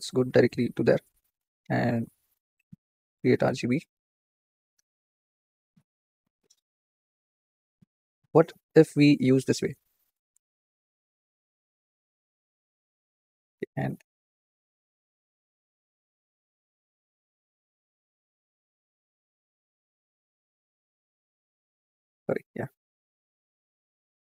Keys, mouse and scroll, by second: 0.6 click, 1.1-1.6 scroll up 8, 3.9 shift+a, 4.6-5.5 scroll up 1, 5.5 scroll up 3, 7.0-8.8 drag, 9.0-9.5 drag, 13.8 Tab, 14.3-14.9 scroll down 2, 14.9 ctrl+i, 16.6-18.2 drag, 19.9-20.5 drag, 21.4 click.